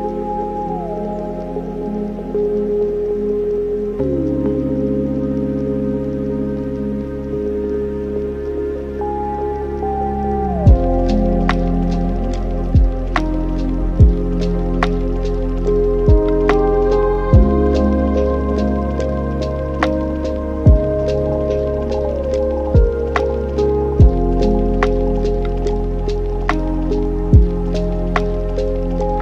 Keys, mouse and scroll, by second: 1.5-4.6 drag, 4.7-5.5 middle drag, 5.5 shift+a, 11.1 middle click, 12.0-13.7 scroll up 2, 14.1-16.7 drag, 19.3 click, 22.7-25.7 drag, 26.8-28.0 drag, 28.0-28.5 scroll down 5, 28.5 middle click, 29.1-29.2 scroll down 4.